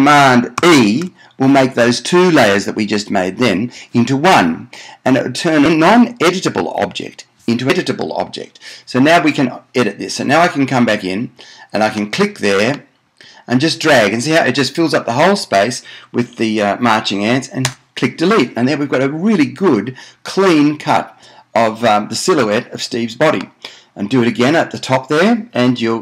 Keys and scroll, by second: 0.9 shift+super+e, 17.8 BackSpace.